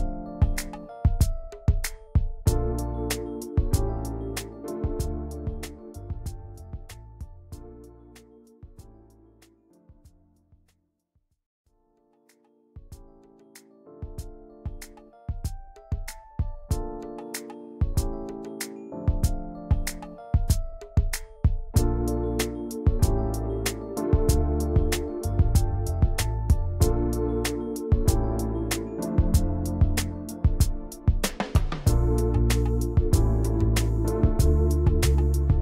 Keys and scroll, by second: 2.9 l, 4.8 v, 6.9 ctrl+d, 8.9 ctrl+g, 15.2 ctrl+g, 27.6 ctrl+g.